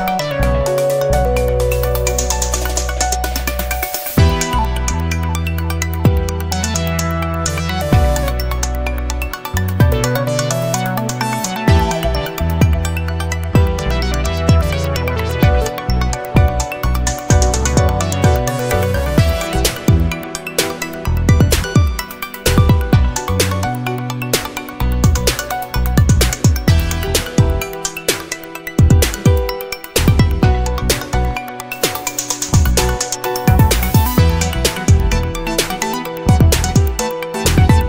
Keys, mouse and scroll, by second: 1.1 Escape, 2.4 right click, 3.6 click, 4.6 Escape, 6.7 click, 8.9-10.3 drag, 10.6 scroll up 1, 13.0-14.9 drag, 15.6-18.9 drag, 19.3-19.7 scroll up 1, 20.8-23.1 drag, 23.8-27.0 drag, 27.4 scroll up 1, 29.8 click, 31.2 click, 32.7 scroll down 2, 35.8 click, 37.3 BackSpace, 37.6 1.